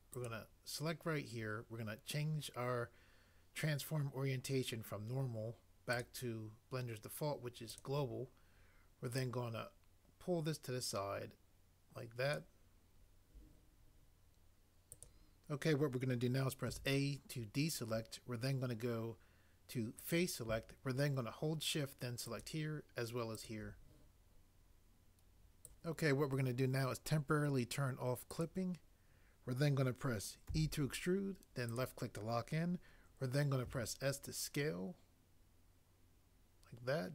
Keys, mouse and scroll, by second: 16.7 a, 30.4 e, 33.8 s.